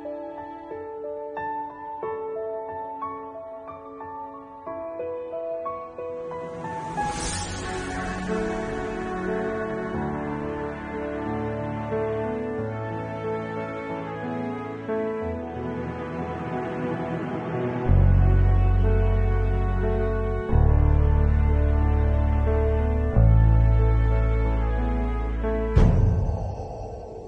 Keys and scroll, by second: 4.8 ctrl+0, 5.0 ctrl+Return, 7.3 ctrl+j, 8.6 ctrl+s, 10.8 p, 13.9 ctrl+alt+z, 17.3 ctrl+Return, 17.4 Delete, 17.5 ctrl+z, 17.7 Delete, 18.0 ctrl+d, 18.0 ctrl+s, 18.8 ctrl+0, 18.9 ctrl+s, 21.1 8, 22.6 ctrl+alt+z, 22.9 ctrl+alt+z, 23.2 7, 23.3 [, 23.8 ctrl+alt+z, 24.7 ctrl+alt+z.